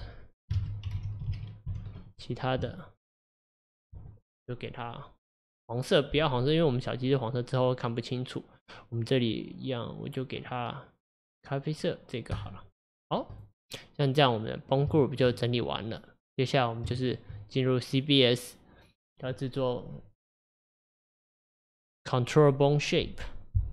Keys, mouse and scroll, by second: 3.1-6.4 drag, 8.6-11.6 drag, 13.4 click, 15.0-19.9 shift+middle drag.